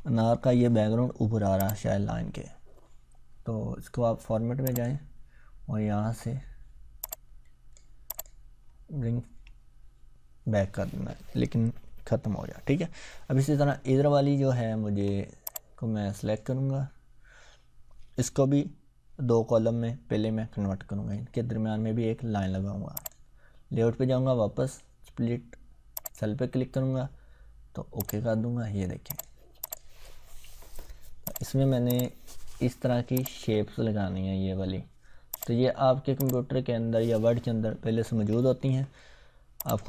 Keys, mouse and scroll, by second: 1.6 click, 4.6 click, 7.0-8.0 click, 8.9-9.4 ctrl+scroll down 1, 14.1 scroll up 1, 14.8 ctrl+scroll down 1, 15.5-16.4 drag, 22.9 click, 25.9 click, 28.6 scroll down 1, 29.1 click, 33.5-35.3 scroll down 1, 35.3 click, 37.8 ctrl+scroll up 1, 39.6 click.